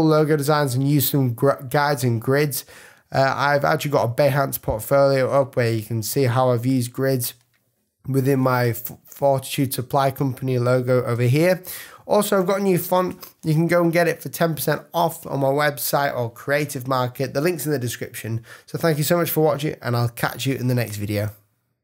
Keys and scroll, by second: 11.1 space.